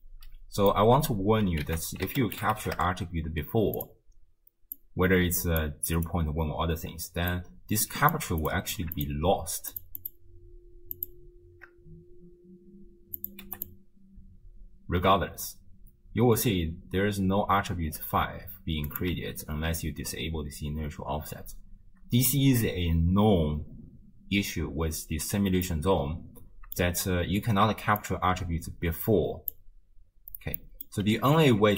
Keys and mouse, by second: 0.0 middle click, 1.7 ctrl+a, 4.8-6.0 drag, 7.3-8.5 drag, 9.0 ctrl+shift+click, 9.7 ctrl+shift+click, 10.0 ctrl+shift+click, 11.0 ctrl+shift+click, 13.2 click, 14.2 space, 16.6 space, 19.2 m, 21.2 m, 25.7-26.8 middle drag, 28.0 click, 28.8 click, 30.6 middle click, 31.3 ctrl+a.